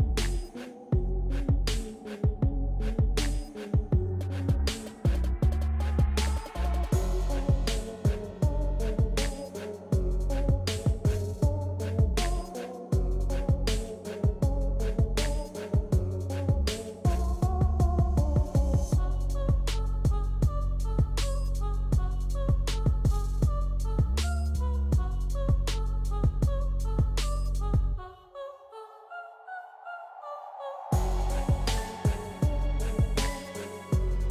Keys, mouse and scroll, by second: 0.5-1.9 drag, 0.5 typing, 2.0 scroll down 1, 2.0 typing, 2.2 click, 3.6-5.5 drag, 4.3 typing, 6.0-6.3 typing, 6.3-12.9 drag, 10.2-12.0 typing, 13.5 typing, 14.3 click, 23.4 ctrl+c, 26.3 click, 28.5 ctrl+v, 31.1-34.3 ctrl+drag.